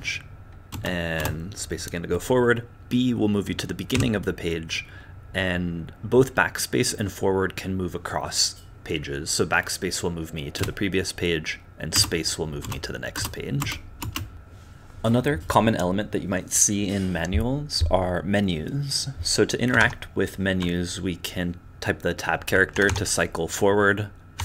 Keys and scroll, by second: 0.0-1.2 typing, 4.0 b, 10.6 BackSpace, 12.0-14.0 typing, 14.3 Tab, 22.7 Tab, 22.8 Tab, 24.3 Tab.